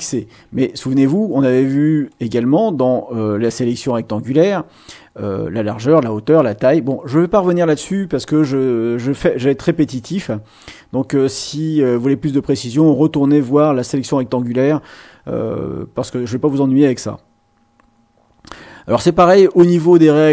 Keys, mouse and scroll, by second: 2.1 click, 7.0 click, 20.1-20.3 drag.